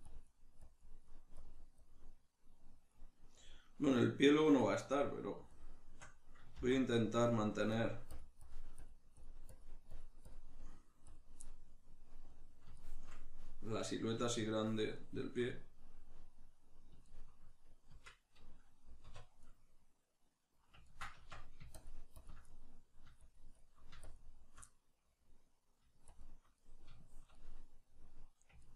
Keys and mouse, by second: 5.6-11.4 shift+drag, 6.6 ctrl+z, 11.4-21.8 middle drag, 17.9 Tab, 19.1 \, 21.2 Tab, 21.8 shift+click, 22.5 middle click, 23.2-24.6 shift+drag, 24.6-26.1 middle drag, 26.1 shift+click, 26.5-28.7 middle drag.